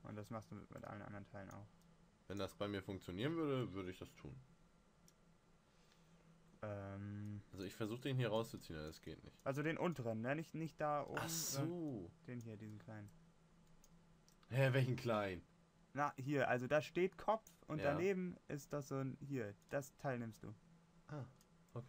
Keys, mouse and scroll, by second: 0.2 click.